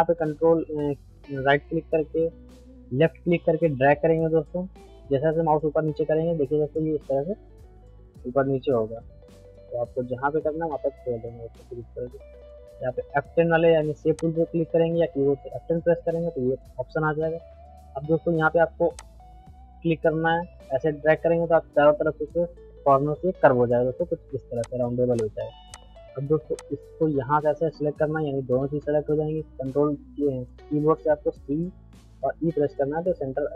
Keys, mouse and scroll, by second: 14.2 click, 19.0-31.2 drag, 31.3 c.